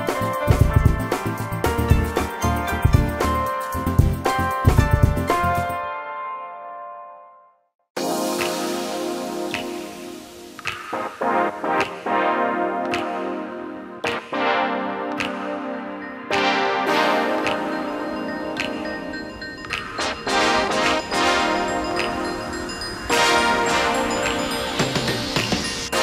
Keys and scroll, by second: 0.9 r, 2.4 space, 4.4 p, 7.0 shift+s, 10.2 space, 19.6 m, 22.4 Up, 24.0 space.